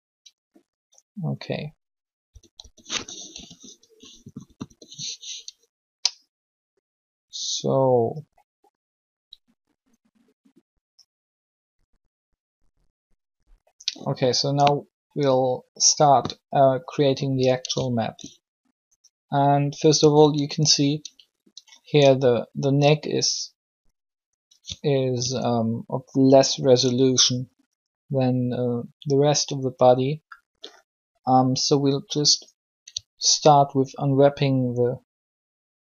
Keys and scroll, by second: 2.2-3.2 typing, 4.4 typing, 20.0 typing.